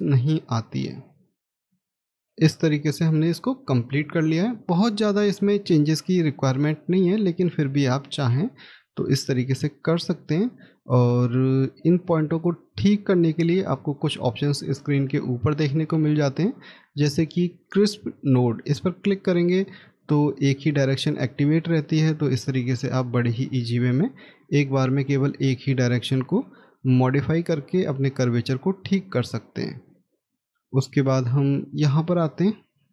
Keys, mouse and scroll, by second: 6.8 scroll up 1, 29.2-29.6 scroll down 1, 30.1 middle click, 30.6 scroll up 1, 31.4 middle click, 31.9 scroll up 1.